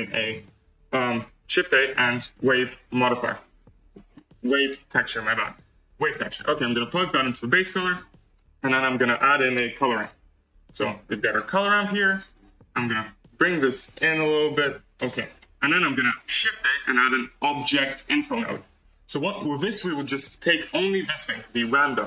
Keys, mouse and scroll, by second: 13.7-22.0 drag.